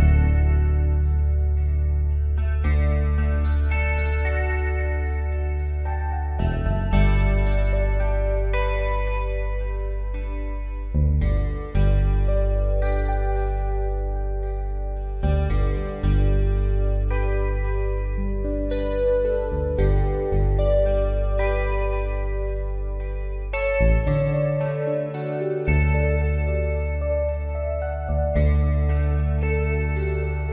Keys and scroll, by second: 3.1 p, 6.4 ctrl+z, 10.5 space, 11.8 space, 12.3 ctrl+alt+z, 13.1 space, 13.5 ctrl+z, 14.4 space, 15.1 space, 15.8 space, 16.3 space, 16.7 ctrl+z, 17.5 space, 18.0 space, 18.4 space, 19.4 space, 20.2 space, 20.7 space, 21.0 space, 21.2 ctrl+z, 22.7 ctrl+z, 23.0 space, 23.3 ctrl+z, 24.0 ctrl+z, 24.7 ctrl+z, 25.3 space, 26.9 space, 27.2 ctrl+z, 29.1-30.5 typing, 30.0 ctrl+z, 30.3 Up.